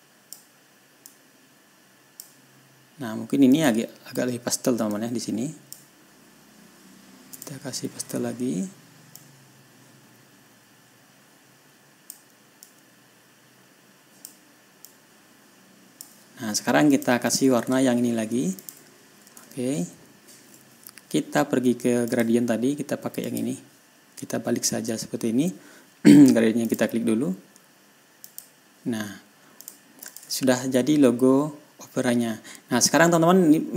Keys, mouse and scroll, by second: 0.0 click, 1.5-2.8 drag, 4.0 click, 5.4 click, 7.8 click, 9.6-12.7 drag, 13.1-14.8 drag, 15.3-16.6 drag, 17.4 click, 17.7 click, 18.3 ctrl+scroll down 2, 18.7 ctrl+scroll up 2, 19.0 ctrl+click, 20.0-20.3 ctrl+scroll down 2, 20.6 ctrl+scroll up 2, 22.5 click, 23.7 click, 27.1 click, 28.7 click, 30.1 click, 30.5 ctrl+click, 31.0 ctrl+scroll down 2, 31.1 ctrl+scroll up 2, 31.8 ctrl+scroll down 2, 32.2 ctrl+scroll up 2, 33.0 ctrl+scroll down 2, 33.6-33.7 ctrl+scroll up 6.